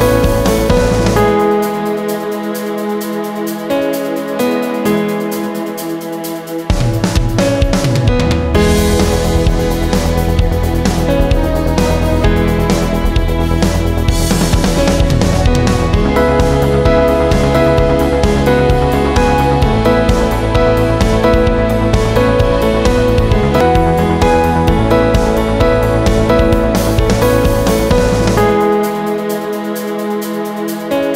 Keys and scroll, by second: 18.9 x, 30.1 x.